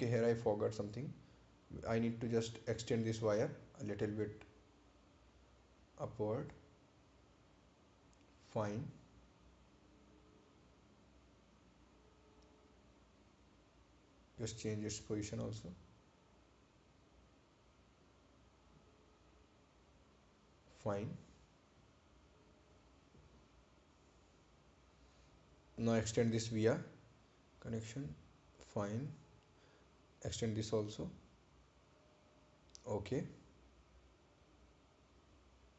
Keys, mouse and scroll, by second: 0.4 click, 23.8 click.